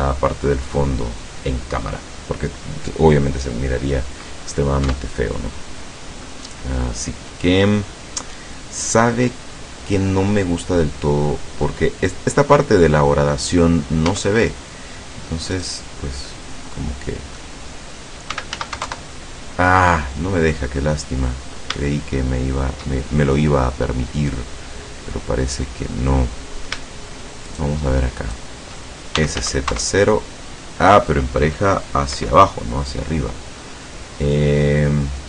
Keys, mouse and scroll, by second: 4.9 Tab, 10.0 scroll down 2, 10.4-11.9 middle drag, 14.1 Tab, 14.6 scroll up 1, 15.6 right click, 16.3-17.6 middle drag, 17.2 click, 18.1-19.1 typing, 20.6-21.7 drag, 22.9-25.8 shift+drag, 25.8-26.9 middle drag, 27.5 shift+right click, 28.2 shift+right click, 29.0-29.8 typing, 32.2 Escape, 33.7 click, 33.9-35.2 middle drag.